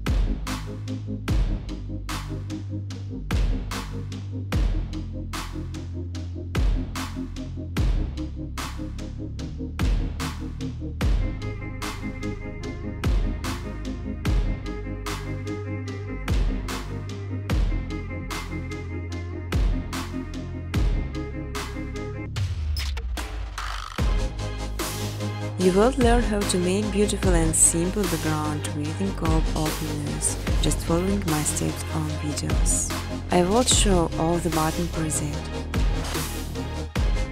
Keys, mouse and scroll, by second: 0.0-0.6 typing, 3.6 click, 3.8 click, 5.1 click, 6.1 click, 6.8 click, 7.7-10.3 typing, 10.6 Tab, 11.5-14.4 typing, 16.1 click, 17.1-17.8 typing, 17.3 click, 17.5 click, 19.5 click, 20.3 click, 21.1 click, 22.0-29.3 typing, 25.5 Tab, 30.1 click, 33.7 click, 34.1-35.2 typing, 36.0 click, 36.2 click.